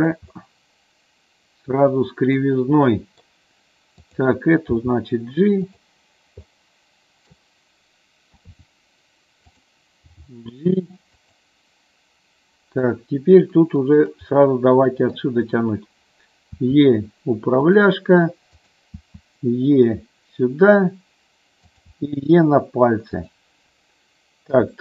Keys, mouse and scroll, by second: 0.0 click, 0.5-2.5 middle drag, 3.0 middle click, 4.1 click, 4.9 g, 5.8 click, 6.7 middle click, 8.4 KP_3, 9.5 click, 10.3 g, 11.3 click, 13.0 middle click, 13.9 middle click, 14.6 middle click, 16.8 e, 17.8 click, 19.2 e, 21.8 click, 22.0 e, 23.4 click, 24.7 KP_3.